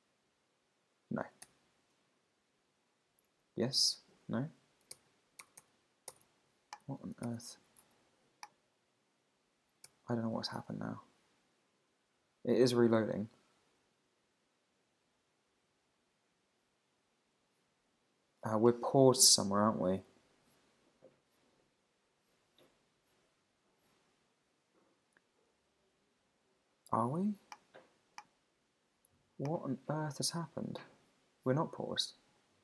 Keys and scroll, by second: 0.2 super+`, 1.4 super+r, 3.3 super+`, 4.9 super+r, 7.8 super+`, 9.9 super+r, 10.6 super+`.